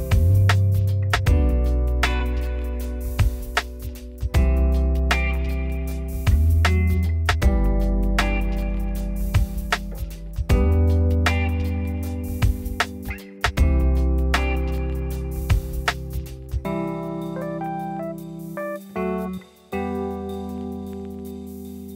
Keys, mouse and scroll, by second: 0.5 Tab, 0.6 scroll down 1, 0.7 shift+middle click, 1.4 click, 1.6-2.2 scroll up 1, 2.2 click, 2.6 g, 5.3 Tab, 5.4 scroll down 3, 5.6 middle click, 5.8 scroll up 3, 6.0 Tab, 6.1 middle click, 6.6 click, 6.9 g, 7.8 middle click, 8.5 click, 8.7 scroll up 1, 9.0 Tab, 9.1 z, 9.5 click, 9.7 z, 10.2 g, 10.9 Tab, 11.0 scroll down 3, 11.2 middle click, 11.4 scroll up 3, 11.6 click, 11.8 middle click, 12.1 z, 12.6 click, 12.7 z, 13.1 g, 14.7 z, 15.2 click, 15.4 click, 15.5 z, 16.1 g, 16.9 scroll down 2, 17.0 middle click, 17.7 click, 17.8 Tab, 17.9 scroll up 1, 18.1 z, 18.7 click, 18.8 z, 19.3 g, 19.9 Tab, 20.1-20.4 scroll down 2, 20.4 click, 20.6 middle click, 20.9 scroll down 1, 21.1-21.6 scroll up 4, 21.3 shift+middle click, 21.6 shift+middle click.